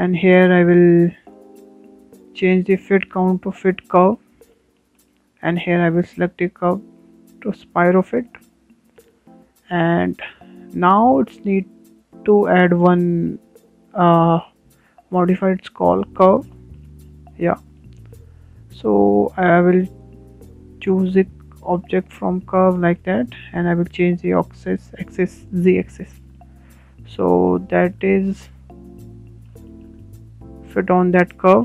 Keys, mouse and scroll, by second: 2.4-5.4 drag, 5.6-6.0 scroll down 4, 6.0-7.1 shift+middle drag, 7.1-9.5 drag, 9.5-11.4 shift+middle drag, 11.4 click, 12.1-13.2 shift+middle drag, 13.2-16.3 drag, 17.7-18.2 shift+middle drag, 18.2 scroll down 4, 18.5-19.0 scroll up 3, 19.0-21.0 shift+middle drag, 21.0-23.9 drag, 23.9-26.6 shift+middle drag, 26.6 click, 27.2-28.9 shift+middle drag, 28.9-29.2 scroll up 4, 29.2-31.6 shift+middle drag.